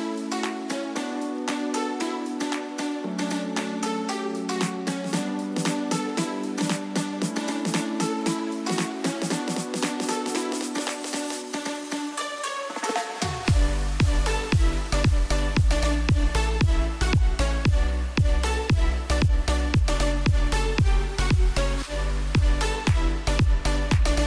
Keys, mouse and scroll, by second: 7.2 space, 7.6 click, 7.7 space, 10.0 click, 13.2 click, 19.1-24.2 drag.